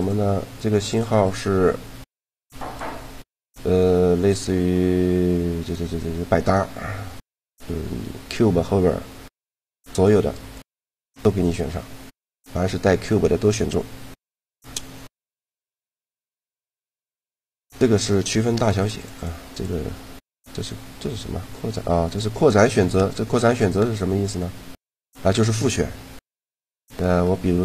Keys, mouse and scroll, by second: 0.0 click, 27.0 middle click.